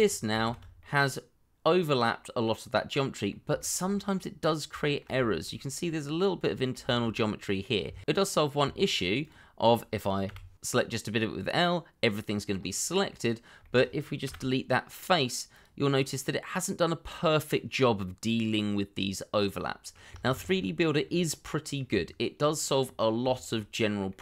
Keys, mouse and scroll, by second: 0.4 shift+z, 0.8 middle click, 3.5 shift+middle click, 3.8-4.1 scroll up 1, 4.1 middle click, 4.8 shift+middle click, 5.5 scroll up 1, 5.8 middle click, 6.8 shift+z, 7.1 scroll down 1, 7.4 middle click, 7.8 Tab, 10.4 l, 10.9 middle click, 13.3 scroll up 1, 13.5 middle click, 14.5 Delete, 16.1 middle click, 20.2 ctrl+z, 20.9 scroll down 1, 21.1 middle click, 21.9 Tab, 22.8 scroll down 1, 23.3 shift+middle click, 24.1 middle click.